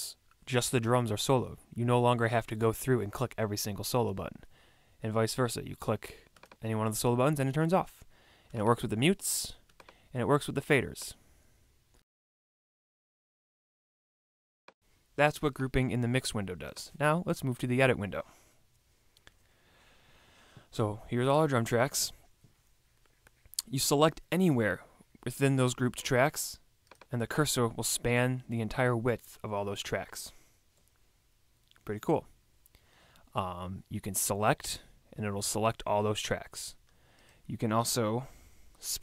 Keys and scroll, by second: 19.1 super+=.